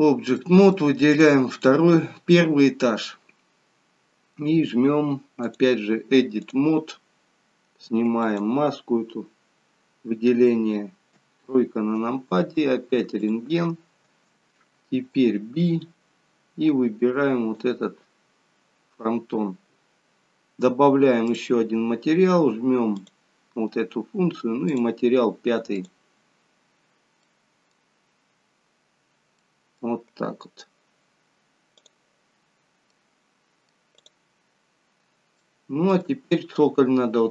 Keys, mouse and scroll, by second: 0.4 middle click, 1.1 click, 11.2 KP_3, 13.2 click, 15.1 shift+b, 21.3 click, 26.6-27.2 scroll up 1, 28.6 middle click, 28.6-28.9 scroll down 3, 29.4 middle click, 29.4-31.6 scroll down 1, 31.9 click, 32.5-33.6 scroll up 3, 32.9 middle click, 34.0 click, 34.8-35.2 scroll down 2, 35.4 shift+middle click, 36.6-37.0 scroll up 3.